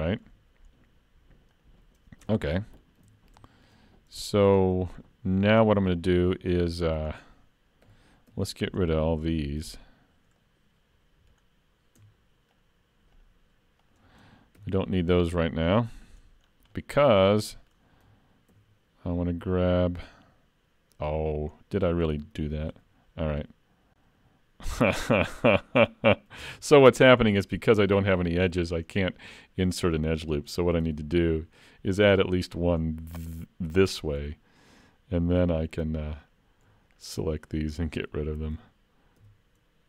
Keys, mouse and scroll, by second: 0.0 shift+middle click, 0.7-1.6 scroll up 1, 1.6 click, 1.6-2.3 scroll up 1, 2.3 Tab, 2.6 middle click, 3.1 alt+a, 3.5 shift+middle click, 3.9-4.2 scroll up 3, 4.2 shift+middle click, 4.6 middle click, 7.9 2, 8.6 alt+click, 10.4 middle click, 12.6 shift+click, 14.6 x, 16.4-16.8 scroll down 3, 16.8 middle click, 17.2-17.6 scroll up 2, 17.6 middle click, 18.5 ctrl+r, 21.6 middle click, 22.7 ctrl+r, 25.6 middle click, 26.5 ctrl+z, 27.2 middle click, 27.8 alt+a, 29.0 middle click, 30.8 ctrl+r, 34.2 alt+a, 36.2 alt+click, 36.9 alt+shift+click, 39.2 x.